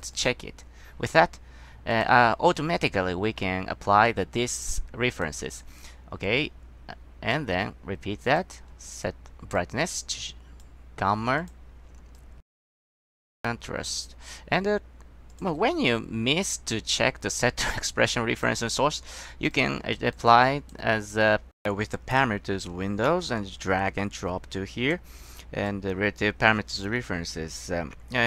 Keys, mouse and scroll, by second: 0.3 click, 2.0 click, 5.3 click, 6.4-7.5 drag, 8.4 click, 9.7-10.7 drag, 11.5 click, 12.3-13.3 drag, 15.4 click, 16.8-18.6 drag, 19.6 click, 20.3 click, 25.8 click.